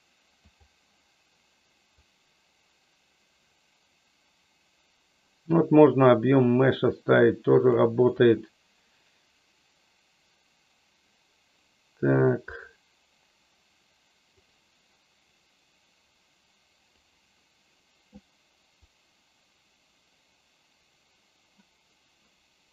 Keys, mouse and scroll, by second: 2.1-7.8 drag, 14.4-17.4 drag, 18.8-22.7 drag.